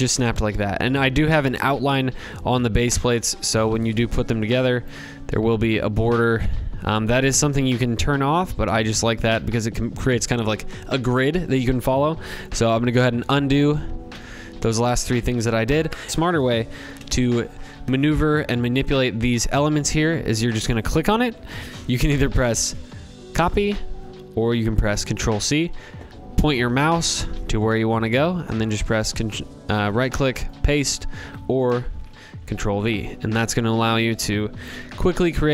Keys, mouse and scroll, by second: 2.5-3.7 drag, 3.8-4.8 drag, 7.8 click, 8.4 click, 12.1 ctrl+z, 12.6 ctrl+z, 13.1 ctrl+z, 13.5 ctrl+z, 14.0 ctrl+z, 16.1 click, 16.1 ctrl+z, 18.7 click, 19.7 click, 21.4 right click, 21.6 ctrl+z, 21.6 alt+click, 22.5 right click, 24.2 ctrl+c, 27.3 right click, 29.4 click, 30.9 ctrl+z, 31.5 ctrl+v, 32.9 click, 33.6 ctrl+c, 34.0 ctrl+v, 34.9 click, 35.3 ctrl+v.